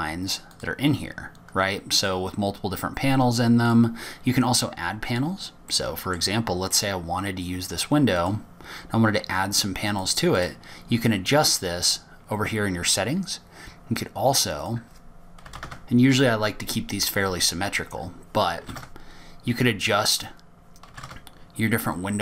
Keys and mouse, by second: 1.2-2.2 drag, 3.4-5.3 drag, 7.1 middle click, 9.5 click, 11.2 click, 11.7 click, 16.2-18.0 drag, 19.0-20.9 drag, 21.6-22.2 drag.